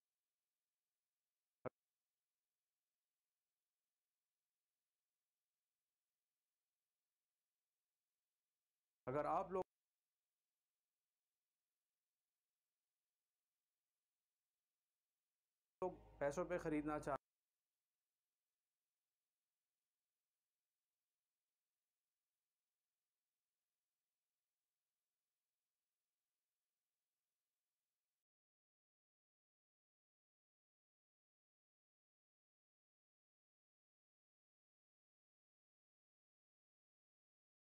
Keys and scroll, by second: 9.0 space, 10.7 c, 12.6 v, 15.2 Delete, 15.8 space, 17.1 space, 18.9 c, 23.0 v, 24.9 shift+Delete.